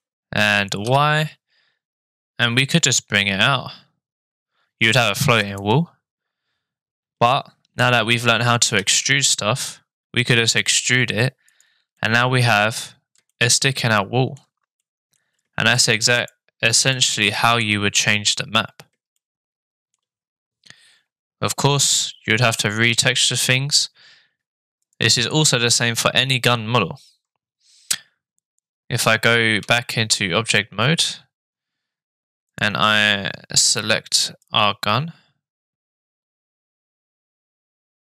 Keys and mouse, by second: 8.9 e, 12.0 click, 12.1 middle click, 13.5 shift+middle click, 14.8 middle click, 16.5 right click, 16.9-17.9 drag, 22.2 shift+middle click, 24.9 click, 30.0 Tab, 35.6 click, 36.5-38.1 right drag.